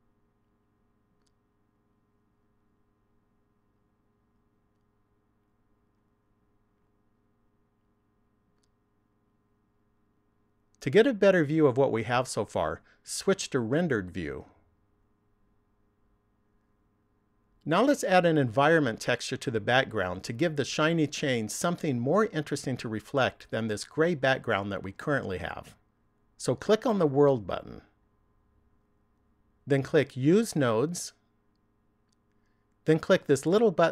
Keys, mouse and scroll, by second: 1.0 shift+middle click, 1.9 middle click, 2.7 shift+middle click, 3.6 middle click, 4.7 middle click, 5.9 shift+middle click, 7.1 middle click, 9.2 shift+middle click, 13.8 click, 29.4 click, 31.2 click.